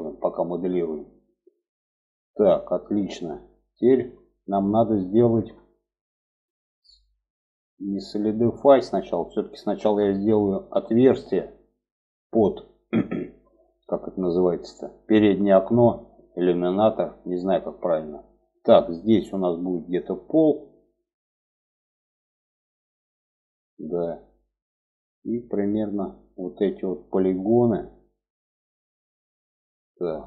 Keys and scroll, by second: 9.1 Tab.